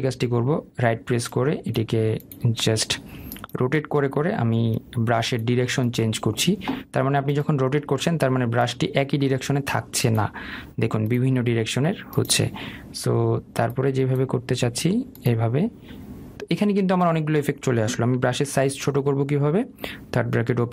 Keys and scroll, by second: 20.4 [.